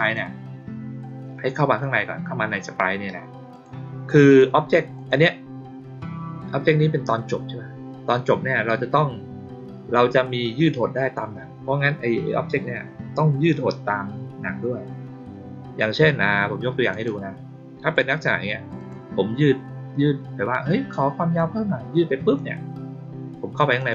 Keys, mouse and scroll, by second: 3.4 click, 4.9 click, 16.8 click, 17.8 click, 18.7 click, 21.3 click, 23.5 click, 23.7 click.